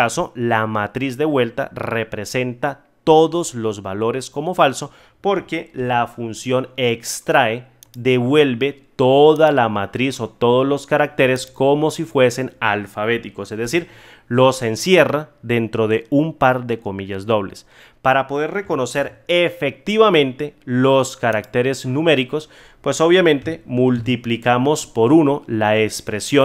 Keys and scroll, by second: 5.7 ctrl+z, 13.6 F9, 18.9 ctrl+z.